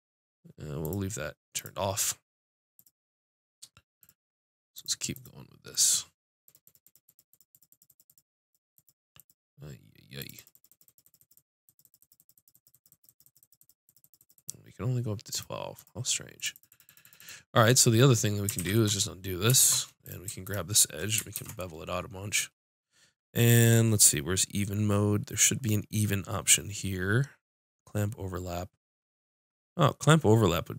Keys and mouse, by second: 6.6-10.2 drag, 16.0 middle click, 16.5-19.2 drag, 18.6 ctrl+z, 19.6 ctrl+Tab, 20.4-22.3 drag, 21.3 ctrl+b.